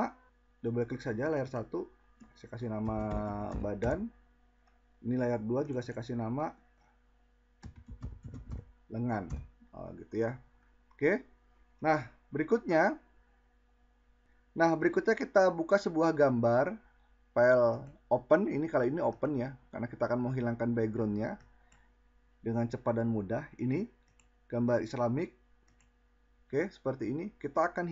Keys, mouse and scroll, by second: 14.2 click, 25.7 click.